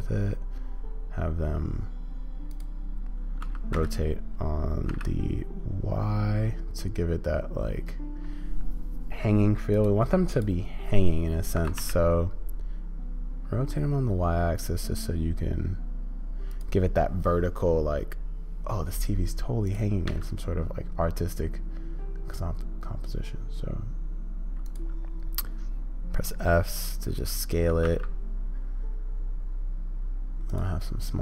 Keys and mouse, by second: 3.4 r, 20.0 s, 27.7 g.